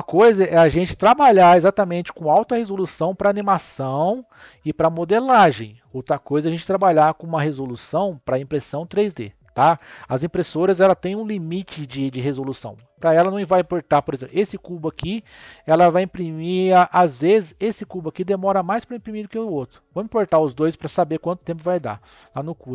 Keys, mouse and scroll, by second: 0.0 Tab, 10.4 scroll down 2, 11.2-12.6 middle drag, 12.6 n, 14.3 click, 17.5 click, 18.8 shift+click, 20.1 click.